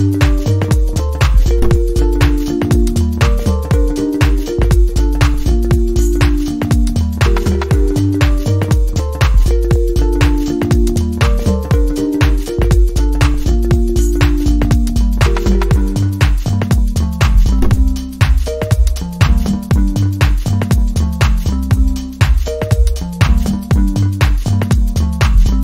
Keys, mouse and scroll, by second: 7.0 alt+click, 20.0 shift+click, 24.9 double click.